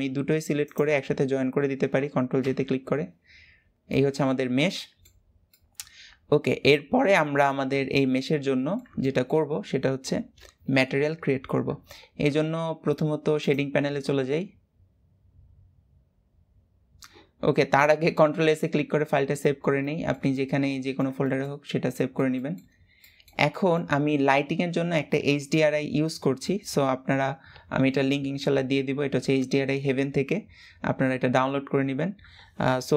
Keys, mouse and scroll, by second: 0.3 shift+click, 2.1 ctrl+j, 3.6-8.3 middle drag, 8.7-15.3 shift+middle drag, 15.3 click, 19.5-21.3 shift+middle drag, 21.3-21.6 scroll up 2, 21.6-22.5 middle drag, 22.5 scroll up 1, 22.7-32.9 middle drag.